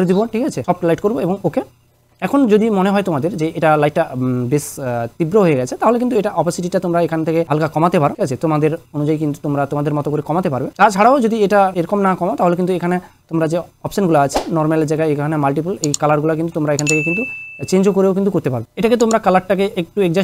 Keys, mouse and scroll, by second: 1.2 click, 3.3 click, 6.5 click, 6.5-12.3 drag, 7.4 click, 10.3 click, 11.7 click, 15.8 scroll down 1, 18.7 scroll down 1, 20.1-20.2 scroll up 1.